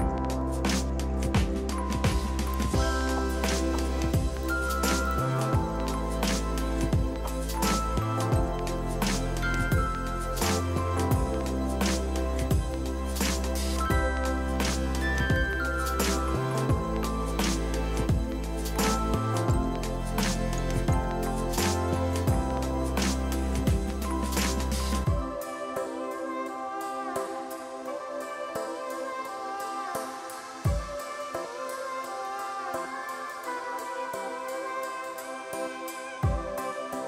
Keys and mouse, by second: 0.8 click, 1.0 ctrl+r, 1.2 click, 2.8 click, 5.2 click, 5.4 a, 5.4 click, 7.9 ctrl+1, 8.8 click, 9.9 KP_1, 10.0 KP_2, 10.1 Return, 10.5 click.